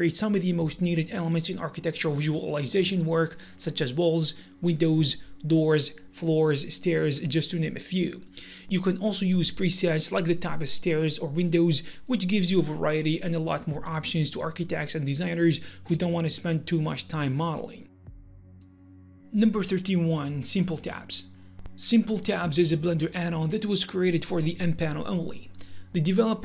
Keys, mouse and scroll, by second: 3.2 Return, 3.6 Return.